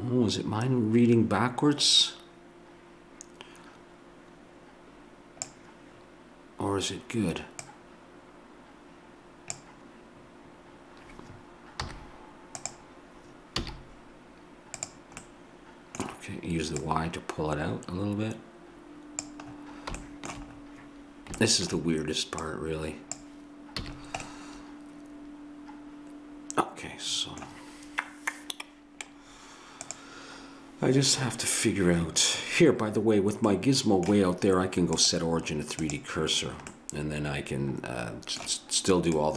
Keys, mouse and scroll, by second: 7.7-9.5 drag, 11.8 z, 13.7 a, 14.8-18.6 drag, 19.5 middle click, 20.1-22.5 middle drag, 22.5-24.3 drag, 23.8 a, 24.3 middle click, 25.3 middle click, 33.5 middle click, 35.0-36.8 drag, 36.8-39.2 middle drag, 39.2-39.3 drag.